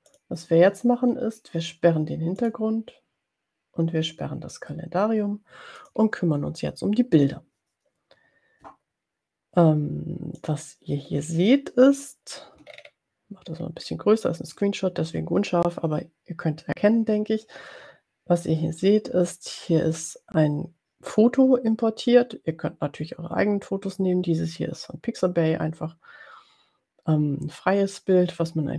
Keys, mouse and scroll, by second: 2.6 click, 5.8 click, 10.7 click, 12.9-13.8 ctrl+scroll up 2, 13.8-14.1 ctrl+scroll down 2.